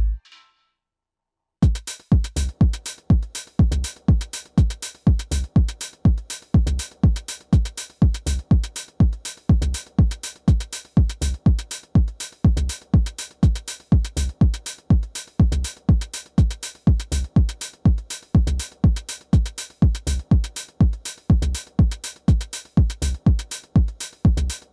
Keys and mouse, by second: 3.7 f, 4.3-6.1 drag, 6.1 middle click, 6.3 click, 9.4 ctrl+z, 9.7 ctrl+z, 9.9 middle click, 11.3-16.8 drag, 14.4 middle click, 16.6-19.8 middle drag, 19.9 middle click, 20.1 alt+w, 23.3-24.7 drag.